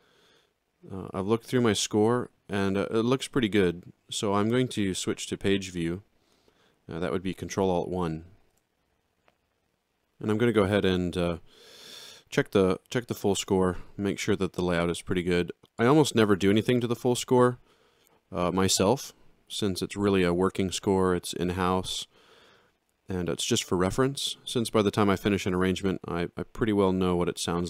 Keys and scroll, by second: 8.3 ctrl+alt+1.